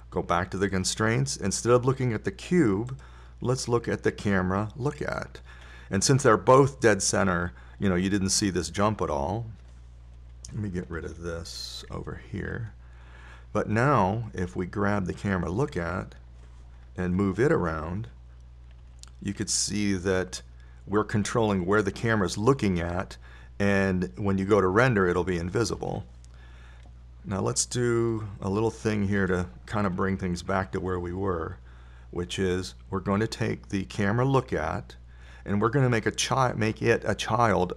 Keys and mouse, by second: 0.1-6.6 drag, 13.3 t, 18.4 KP_1, 20.2 g, 29.6-32.3 middle drag.